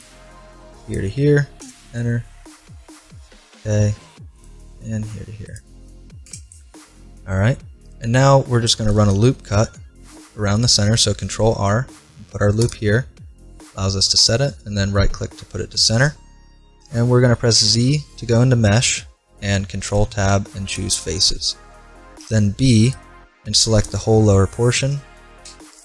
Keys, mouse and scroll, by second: 2.0-3.6 middle drag, 3.4 k, 7.2-9.2 middle drag, 9.2 ctrl+r, 15.0-19.1 middle drag, 17.5 z, 19.3 middle click, 19.7 ctrl+Tab, 22.2 b, 25.5 Delete.